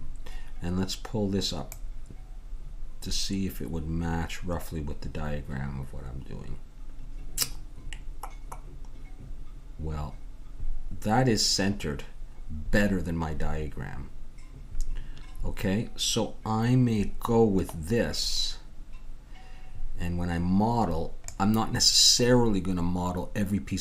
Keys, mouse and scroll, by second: 1.7-5.6 drag.